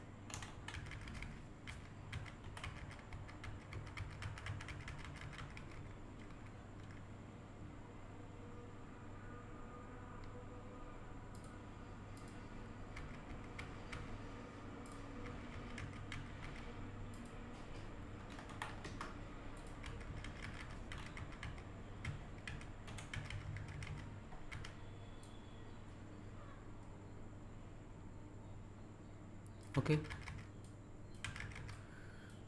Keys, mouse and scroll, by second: 0.4 Left, 2.4 Down, 11.3 click, 14.8 click, 17.1 click, 19.6 click, 22.9 Right, 25.2-29.8 drag, 30.6 click, 31.7 click.